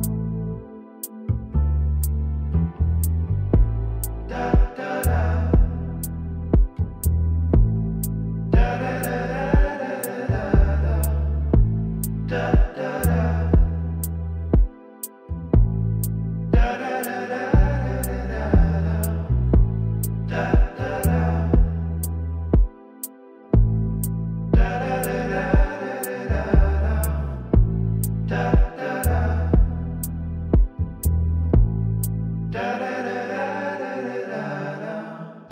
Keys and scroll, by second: 1.8 ctrl+z, 3.8 ctrl+d.